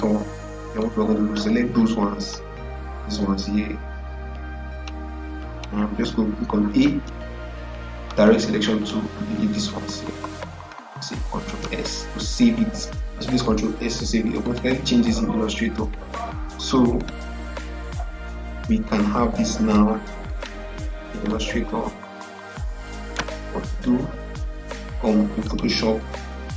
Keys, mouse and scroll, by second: 0.7-5.4 drag, 6.7 a, 7.9-9.9 drag, 9.8 Delete, 11.2 ctrl+s, 13.0 scroll down 1, 14.3 click, 16.8-23.7 drag, 25.3 click.